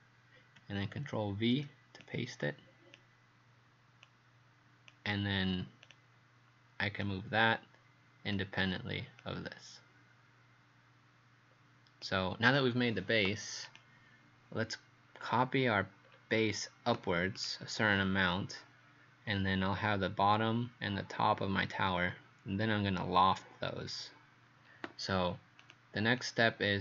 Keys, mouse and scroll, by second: 1.3 ctrl+v, 2.0 click, 15.2 scroll down 2, 16.1 scroll down 1, 17.4 click, 17.9-25.0 scroll down 4, 26.2 click.